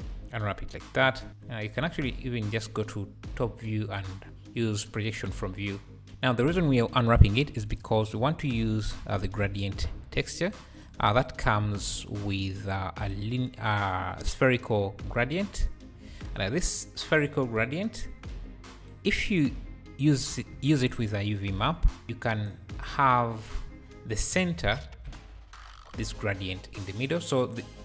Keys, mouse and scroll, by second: 1.2 r, 1.8 KP_7, 3.4 u, 4.0 u, 4.3 u, 6.0 Tab, 6.0 r, 7.2 shift+a, 11.1 ctrl+shift+click, 11.7-12.5 scroll up 4, 12.5-13.0 scroll up 3, 13.0-16.2 drag, 16.2 `, 16.5 `, 16.6 `, 18.4-18.9 scroll up 4, 20.3 shift+a, 22.0 click, 22.0 shift+a, 22.5 click, 24.8 `, 25.5 g, 25.7 g.